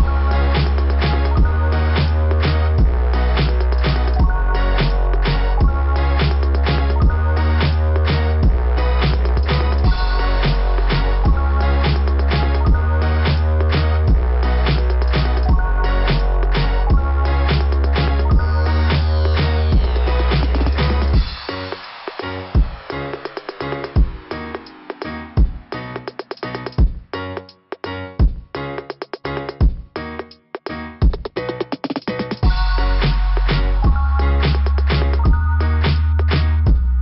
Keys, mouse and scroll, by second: 0.0 click, 0.1 click, 0.9 click, 1.2 click, 1.7 right click, 1.8 right click, 4.6 click, 5.1 right click, 5.4 right click, 6.7 click, 7.6 click, 10.7 right click, 11.0 right click, 11.1 right click, 11.3 right click, 11.5 right click, 11.6 right click, 11.7 right click, 11.9 right click, 12.1 right click, 12.9 click, 15.2 scroll down 1, 15.9-16.7 scroll down 3, 17.3 scroll down 1, 19.5 click, 21.8 click, 23.5 scroll down 1, 25.4 click, 26.6 click, 28.1 click, 29.9 click, 31.3-31.8 scroll down 3, 34.8 click, 36.2 click.